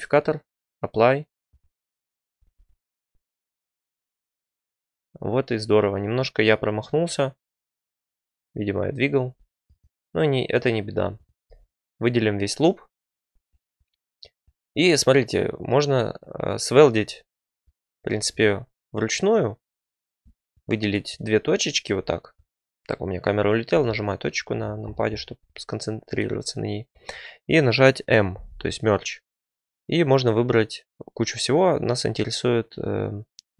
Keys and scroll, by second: 2.3 Tab, 9.1 2, 23.7 ., 28.3 m.